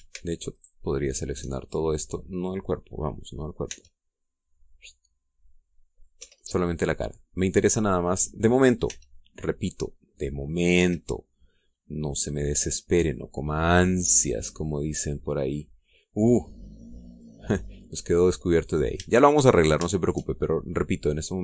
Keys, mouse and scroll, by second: 1.3 alt+shift+right click, 2.4 alt+shift+middle click, 2.4-2.7 alt+shift+scroll down 1, 4.1 middle click, 4.1 scroll down 1, 4.5 c, 5.3-7.0 drag, 7.0 Escape, 7.2-8.5 drag, 9.7 c, 9.9-11.5 middle drag, 11.6 Escape, 11.8-13.7 middle drag, 13.7-15.6 middle drag, 15.7-16.1 scroll up 1, 16.3 middle click, 16.7 scroll down 1, 17.3-20.3 middle drag, 20.4 shift+scroll up 1, 20.7 shift+middle click.